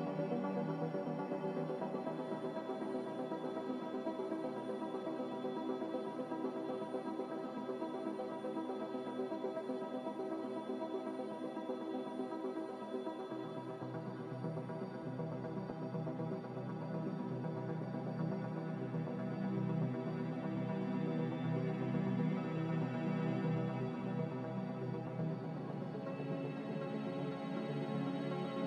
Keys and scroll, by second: 7.5 1, 13.5 2, 15.9 3, 18.4 4, 22.8 1, 24.2 q, 26.1 ctrl+j.